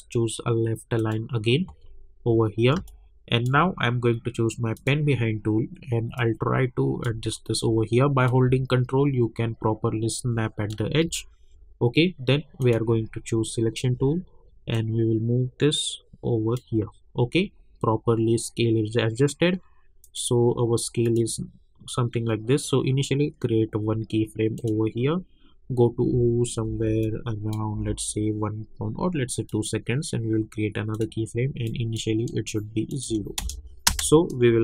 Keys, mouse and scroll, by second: 1.0 click, 1.9-2.5 alt+scroll down 2, 2.7 space, 2.8 click, 3.2 space, 4.7 click, 7.2-7.7 alt+scroll up 1, 8.2-11.1 drag, 11.1-11.5 alt+scroll down 1, 12.6 click, 13.5 alt+scroll up 1, 14.7-16.8 drag, 16.8-17.2 scroll down 1, 18.3 scroll up 1, 20.0 click, 24.5 click, 26.6 =, 27.0 click, 27.7 =, 29.5 click, 33.4 Return, 33.8 space.